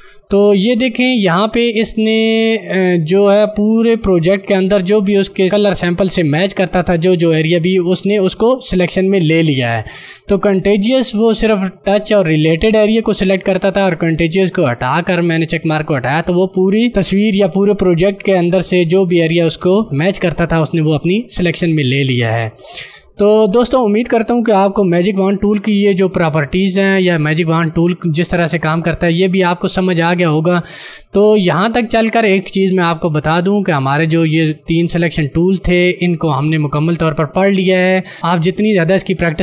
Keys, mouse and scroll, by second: 25.4 d.